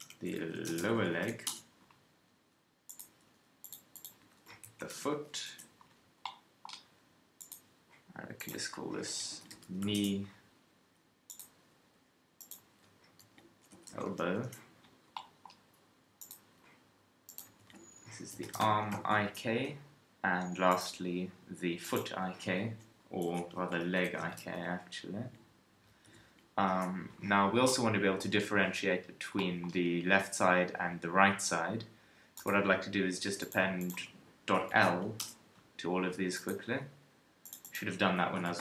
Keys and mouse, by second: 3.6-6.2 middle drag, 8.4-10.1 middle drag, 10.1-12.4 drag, 15.1-17.2 middle drag, 19.0-21.8 middle drag, 27.7-33.0 middle drag, 33.0 click, 36.4-37.4 drag.